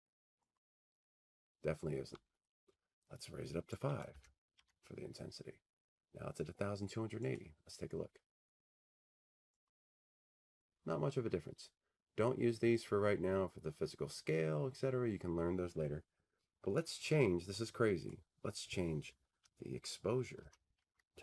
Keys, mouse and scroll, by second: 2.6-4.5 drag, 6.1 click, 6.2 5, 6.7 Tab, 9.4-13.9 drag, 20.1-21.2 drag.